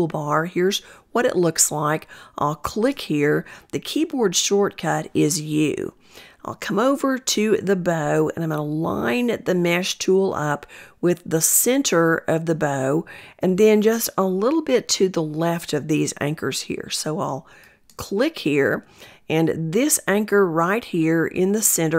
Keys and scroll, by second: 2.1 u.